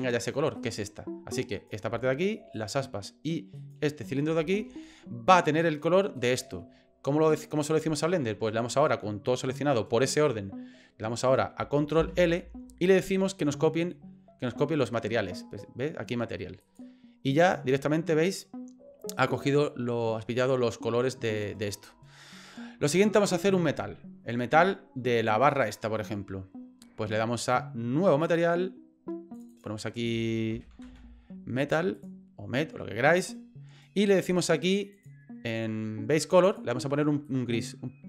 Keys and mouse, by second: 0.0 right click, 0.6 right click, 1.5 right click, 2.5 shift+right click, 3.6 shift+right click, 6.2 shift+right click, 12.0 ctrl+l, 17.4 right click, 25.4 right click, 28.3 click, 29.4 click, 29.5-32.1 drag, 34.9 click, 36.5 click.